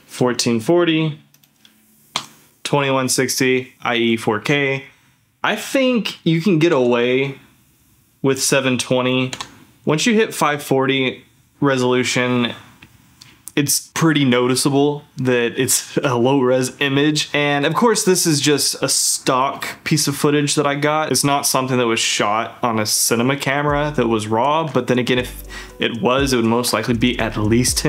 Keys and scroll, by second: 2.2 d, 6.7 d, 9.3 d.